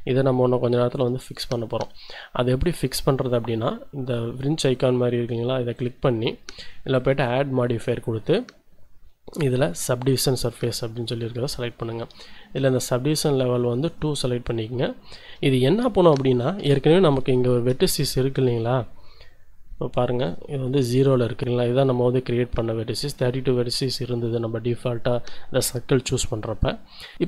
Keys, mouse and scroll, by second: 5.7 click, 6.9-9.0 drag, 10.1-11.2 drag, 11.4 shift+click, 13.9 click, 14.9 shift+click, 16.6 1, 17.3 shift+click, 17.8 shift+scroll up 2, 18.2 z, 18.7 scroll up 1, 20.2 click, 20.8 click.